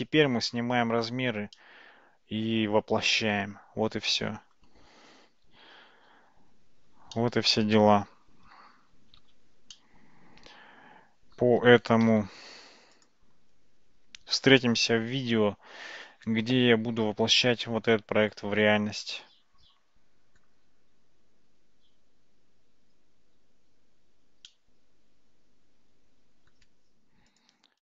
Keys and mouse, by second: 1.6-4.6 middle drag, 6.2 alt+g, 6.2 alt+h, 7.2-8.6 middle drag, 9.3 alt+z, 9.8-11.4 middle drag, 12.1 a, 12.5 a, 13.0 click, 14.6-20.4 middle drag, 24.6-26.6 middle drag, 27.4 click.